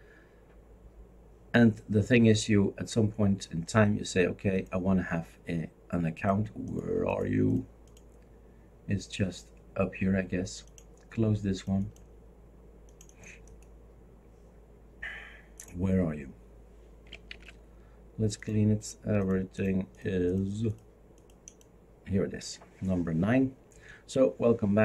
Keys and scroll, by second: 17.3 shift+super+q.